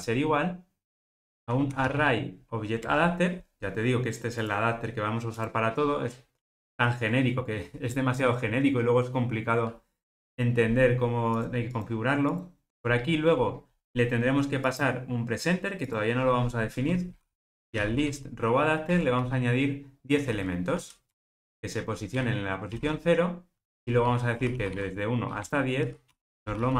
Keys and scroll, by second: 2.9 Return, 7.9 super+p, 12.7 super+p, 19.0 Return.